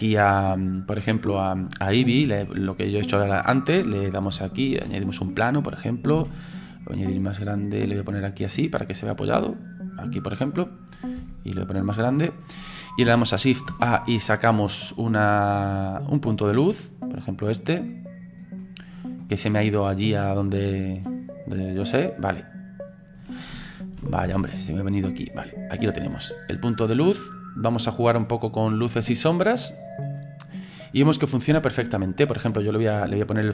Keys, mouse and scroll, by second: 3.3 shift+a, 4.7 alt+g, 7.9-11.2 drag, 11.2 s, 12.2-13.7 scroll down 3, 16.3 shift+a, 17.3-18.6 drag, 18.6 middle click, 19.4-20.2 scroll down 4, 20.2-24.2 drag, 24.2 alt+g, 25.0-26.9 drag, 26.9-28.1 middle drag, 28.1-29.3 drag, 29.3 middle click, 30.2 click, 30.8-31.3 scroll up 4, 31.3-33.5 middle drag.